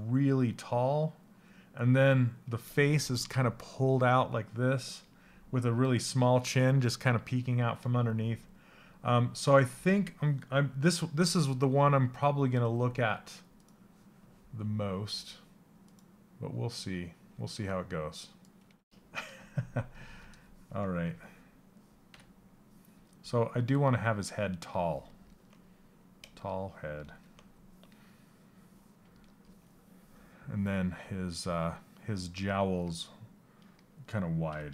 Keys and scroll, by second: 34.0 q.